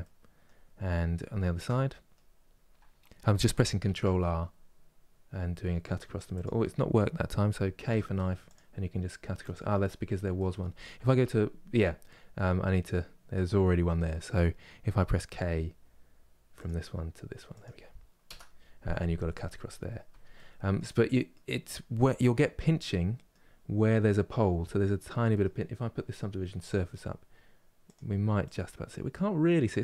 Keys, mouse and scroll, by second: 0.4 scroll down 1, 1.1-2.1 shift+middle drag, 2.1 scroll up 2, 3.5 ctrl+r, 7.5 k, 10.1 middle click, 10.9 1, 19.2 scroll down 2, 20.0-22.2 middle drag, 22.2 Tab, 22.6 middle click, 23.2 scroll up 2, 24.4 scroll up 1, 24.4-25.0 scroll down 3, 25.0-26.3 middle drag, 26.3-28.6 drag, 28.6-29.8 middle drag.